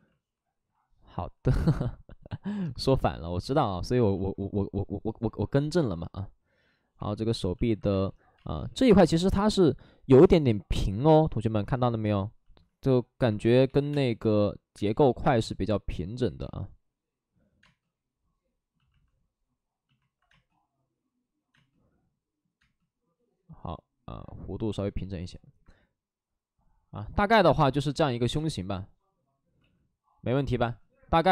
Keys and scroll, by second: 6.7-8.3 typing, 12.7 space, 13.4 space, 13.6 3, 13.8 3, 14.9 ctrl+z, 15.1 space, 16.2 ctrl+z, 17.5 space, 20.7 space, 21.5 space, 22.6 space, 28.3 space, 29.5 ctrl+z, 30.5 space.